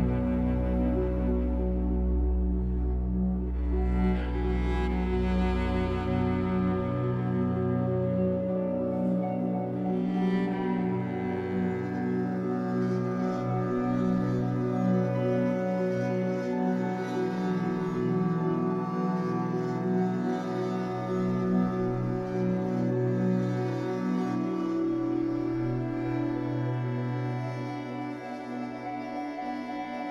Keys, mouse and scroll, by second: 0.6 e, 1.3 e, 2.4 e, 4.2 ctrl+z, 4.6 shift+middle click, 4.9 a, 5.3-6.6 scroll up 1, 6.6 shift+middle click, 6.9-9.4 scroll up 1, 9.4 e, 10.2 s, 13.2 g, 15.2 click, 15.5 shift+click, 15.7 shift+click, 16.0 shift+click, 16.6 shift+click, 16.9 g, 18.1 click, 18.4 g, 19.0 g, 19.6 click, 19.7 g, 21.9 click, 22.2 click, 22.4 g, 23.8 click, 23.9 g, 24.5 click, 24.7 g, 25.6 click, 25.7 g, 27.6 z, 28.1 shift+middle click, 28.3 z, 28.8 shift+middle click, 29.0-29.3 scroll up 3, 29.3 a, 29.4 scroll down 5, 29.7 middle click, 30.0 g.